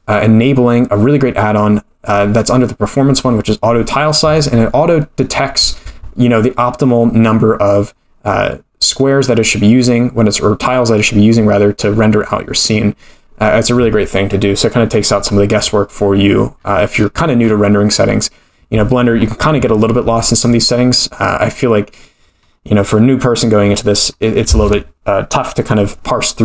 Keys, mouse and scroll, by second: 1.5-2.4 scroll down 1, 2.4 click, 2.4 scroll down 1, 16.0-20.5 scroll up 12, 21.3-23.4 scroll down 11, 23.4-24.4 scroll down 2, 24.4-26.4 scroll down 4.